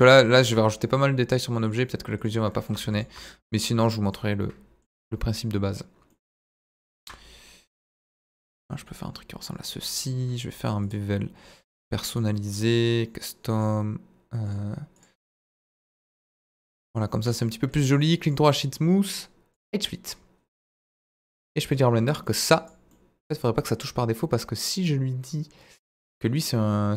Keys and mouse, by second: 0.5 Tab, 1.8 click, 2.5 middle click, 3.4 middle click, 4.5 middle click, 5.0 middle click, 6.1 middle click, 7.0 ctrl+b, 10.0 click, 10.8 click, 12.8 click, 13.5 click, 14.6 click, 15.6 middle click, 16.4 Tab, 16.6-17.0 middle drag, 17.2 middle drag, 17.4-17.7 middle drag, 18.1 right click, 19.1 drag, 21.5 middle drag, 22.6 click, 22.9-23.4 middle drag, 24.7 click, 26.1 click.